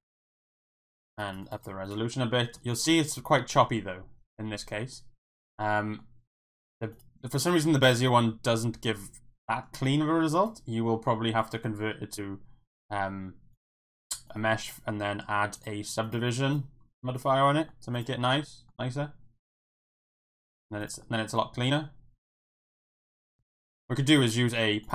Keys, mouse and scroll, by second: 0.4 click, 1.2 click, 1.3 click, 1.4 click, 1.6 click, 1.8 click, 2.0 middle click, 3.9-4.3 middle drag, 4.5-6.0 middle drag, 6.3-6.6 middle drag, 7.0 click, 8.0-9.6 middle drag, 10.4 click, 10.9 middle click, 11.4-14.4 right drag, 16.2-17.2 drag, 17.7 middle drag, 18.1-18.7 middle drag, 20.4 middle drag, 21.0 middle drag, 21.3 click, 21.6 Tab, 22.4 Tab, 22.7-23.4 middle drag.